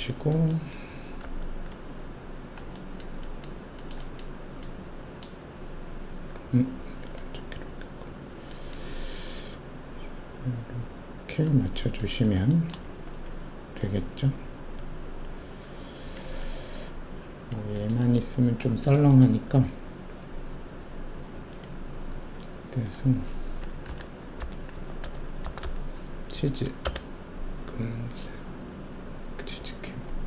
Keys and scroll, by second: 12.9 alt+shift+q, 23.8-25.6 typing, 26.8 Return.